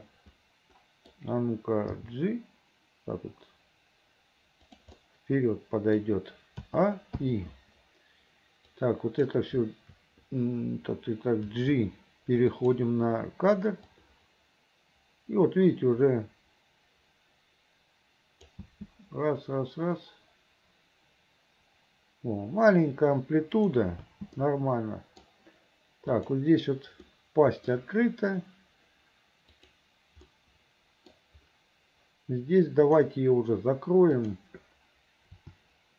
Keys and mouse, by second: 0.3 middle click, 2.1 g, 5.2 middle click, 6.8 a, 7.3 i, 8.8 click, 11.5 g, 14.0-18.6 drag, 23.7 click, 24.1 space, 24.5 middle click, 26.3 click, 27.2 middle click, 29.6 click, 30.4 middle click, 33.0 click, 34.3 click, 35.5 r.